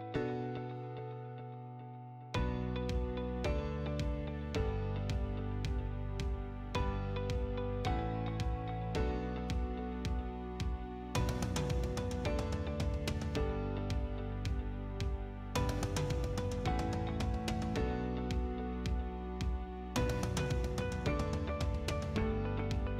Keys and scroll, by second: 3.3 t, 3.7 space, 7.4 Escape, 9.1 c, 9.7 space, 11.8 F8, 13.8 F8, 14.7 Escape, 16.0 F8, 17.2 m, 17.3 space, 19.4 Escape, 20.4 F8.